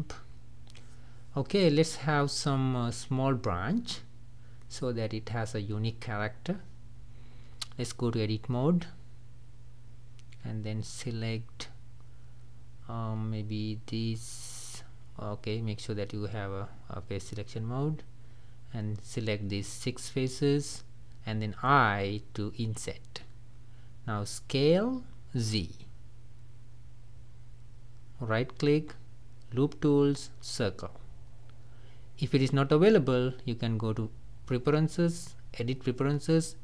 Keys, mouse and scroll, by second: 1.0 click, 1.3-2.6 middle drag, 2.6-3.3 scroll down 3, 3.6-5.1 middle drag, 5.1 click, 6.9-8.7 middle drag, 8.7-9.0 scroll up 2, 9.0-12.6 middle drag, 12.6 click, 16.1-18.1 drag, 24.2 s, 28.5-32.0 right drag, 33.8-36.6 drag.